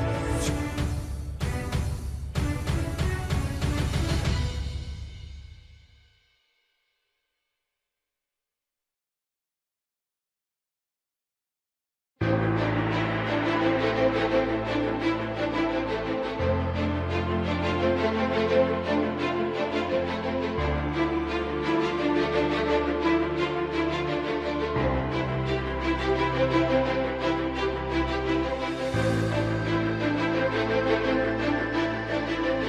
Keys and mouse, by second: 1.5 s, 3.5 KP_1, 6.2 s, 8.5 middle click, 10.2 middle click, 13.2 2, 14.9 alt+click, 15.9 alt+shift+click, 18.1 shift+click, 19.1 middle click, 20.0 middle click, 21.1 middle click, 22.7 shift+click, 24.0 ctrl+b.